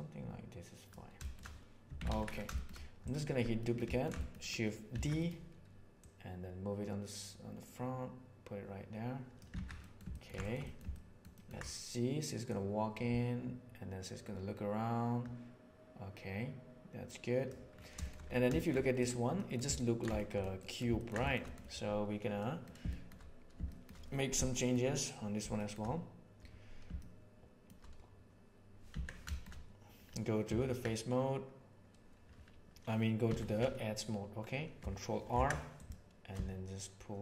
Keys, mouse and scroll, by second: 1.2 shift+middle click, 1.8 Tab, 2.0 alt+a, 2.5 shift+middle click, 3.5 middle click, 4.1 shift+middle click, 4.8 shift+d, 5.8-8.1 drag, 8.1-9.3 middle drag, 9.5 alt+a, 9.8-10.3 ctrl+middle drag, 10.4 middle click, 10.6 middle drag, 10.8-11.2 ctrl+middle drag, 11.3 ctrl+middle click, 12.4 click, 15.2-17.4 middle drag, 18.0 shift+middle click, 18.5 shift+middle click, 18.8 right click, 19.3 middle click, 19.7 ctrl+middle drag, 20.1-20.4 shift+middle drag, 20.6 middle click, 20.9 ctrl+middle click, 21.2 shift+middle click, 21.4 middle click, 22.4 middle click, 22.8 shift+middle click, 23.6 shift+middle click, 24.4 shift+middle click, 25.5 shift+middle click, 26.9-27.6 shift+middle drag, 28.8 Tab, 29.3 middle click, 30.4 3, 33.2 2, 35.2 ctrl+r.